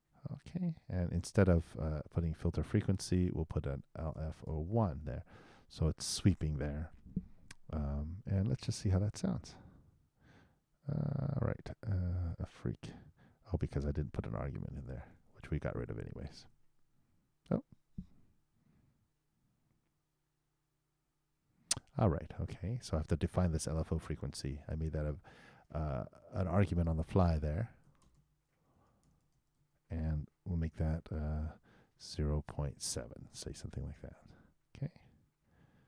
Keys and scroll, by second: 9.3 super+Return, 16.2 super+BackSpace, 16.4 super+Return, 33.6 super+7, 34.0 super+Return.